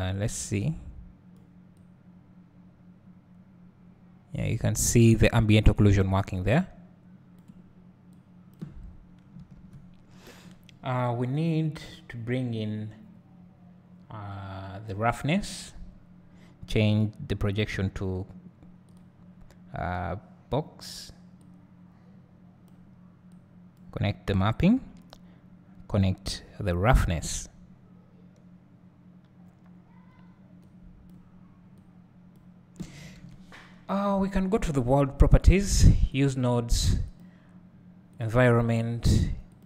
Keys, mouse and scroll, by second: 0.6 click, 1.9 click, 2.5-6.2 drag, 8.3 click, 8.9-10.6 scroll down 3, 9.1-15.9 drag, 10.6-12.2 scroll down 1, 21.5-23.4 drag, 26.3-30.7 drag, 31.8 click, 36.2 click, 38.3-39.6 drag.